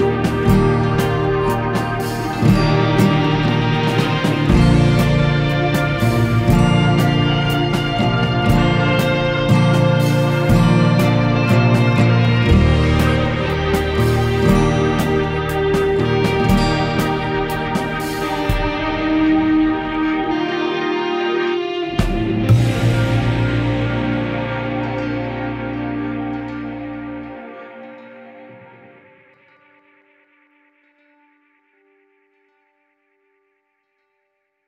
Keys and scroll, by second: 9.8 ctrl+a, 15.2 ctrl+-, 18.5 ctrl+z.